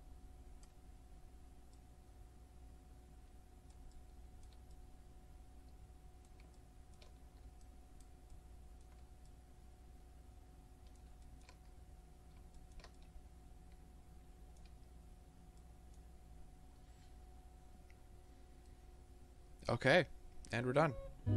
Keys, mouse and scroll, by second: 1.0 scroll up 1, 1.4-1.8 scroll down 1, 1.8-4.1 middle drag, 4.8-8.5 middle drag, 9.3-21.0 middle drag, 11.7 scroll up 2, 12.0-12.8 scroll down 2, 21.1 middle click.